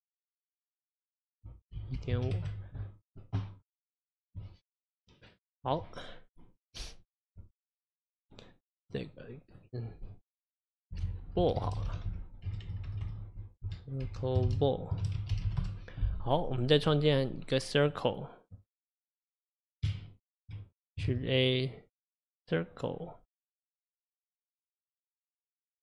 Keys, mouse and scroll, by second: 1.0-4.1 drag, 4.1-7.1 middle drag, 8.9 click, 9.1-11.1 drag, 11.1-13.6 typing, 15.5 l, 16.5 click, 17.8 click, 19.9 Tab, 21.1 shift+a.